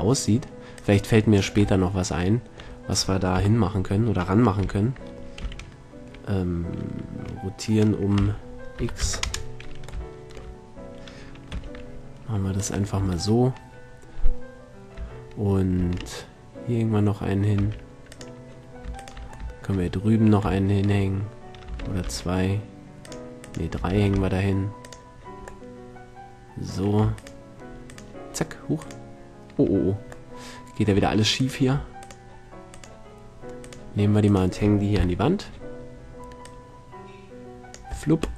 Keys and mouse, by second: 0.8-1.2 middle drag, 1.2-2.0 drag, 3.8 KP_1, 5.1 z, 5.9 r, 11.9 g, 16.2 shift+d, 18.6-19.9 drag, 19.9-20.5 shift+middle drag, 20.5 shift+click, 20.6-21.7 middle drag, 22.3 shift+d, 24.4 shift+d, 26.3-27.1 middle drag, 30.7 middle click, 31.4 a, 31.9-32.7 drag, 32.7-35.6 right drag, 35.4 KP_3, 35.6-36.9 middle drag, 36.9-38.2 drag, 38.3 middle drag.